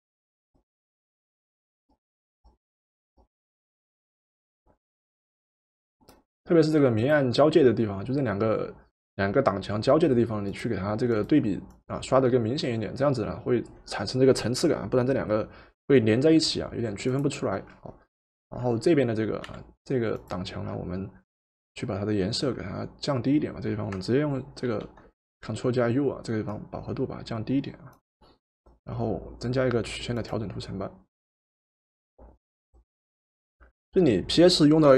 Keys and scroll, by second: 19.5 v, 24.7 ctrl+u.